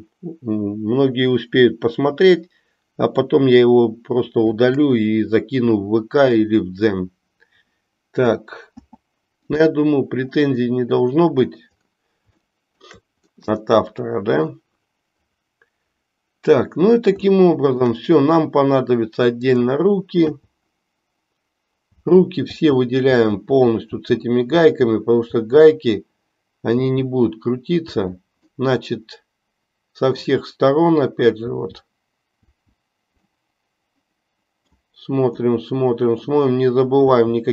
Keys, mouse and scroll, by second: 8.8 p, 10.8 middle click, 12.4 shift+middle click, 13.8 middle click, 17.4 shift+middle click, 19.4 click, 20.4 l, 28.0 l, 28.5-30.2 middle drag, 31.5 l, 33.4-34.9 middle drag, 35.6 middle click, 37.2 l.